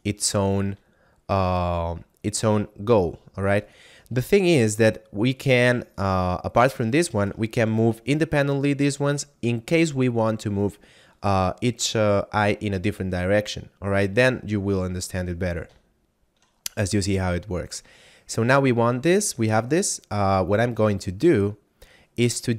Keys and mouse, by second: 0.4 shift+right click, 3.6 right click, 7.6 g, 9.0 right click, 15.8 shift+middle click, 16.6 middle click, 17.2 shift+middle click, 22.0 right click.